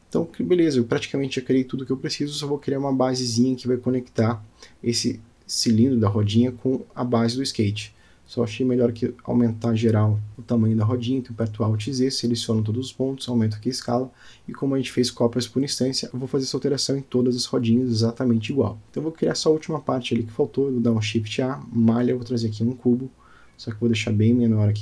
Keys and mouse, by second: 2.2-4.0 drag, 4.0-7.4 middle drag, 7.7-8.1 shift+middle drag, 8.5 click, 9.2 Tab, 9.8 alt+z, 10.3 click, 11.7 s, 14.7 click, 15.6 Tab, 16.3 click, 17.5-19.2 middle drag, 20.3-20.8 middle drag, 21.0 shift+a, 23.6-24.8 drag.